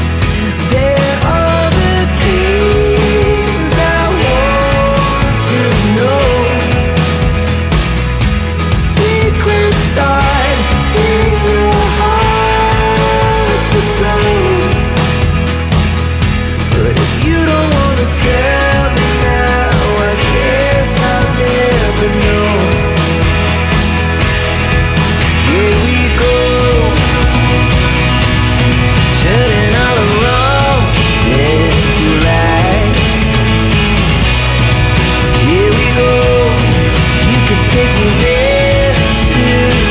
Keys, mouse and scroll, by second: 0.0 scroll up 1, 1.1 click, 1.9 click, 3.6 click, 4.2 click, 7.8 click, 8.6 shift+click, 9.1 Delete, 9.6 click, 10.8 click, 12.2 click, 13.6 click, 15.2 click, 16.4 2, 17.6 click, 18.5 2, 20.3 click, 22.3 scroll up 1, 23.5 scroll down 1, 29.9 click, 31.3 click, 32.7 click, 37.6 click, 39.1 click.